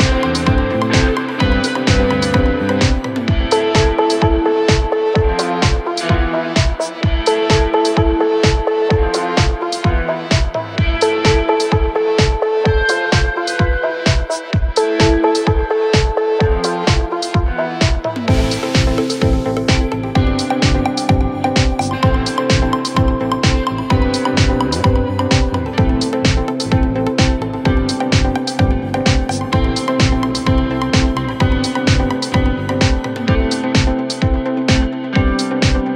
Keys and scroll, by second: 1.7 ], 9.4 ], 9.8 ], 15.2 ctrl+z, 23.6 ctrl+z, 26.6 ], 29.2 ], 30.6 ], 32.3 ].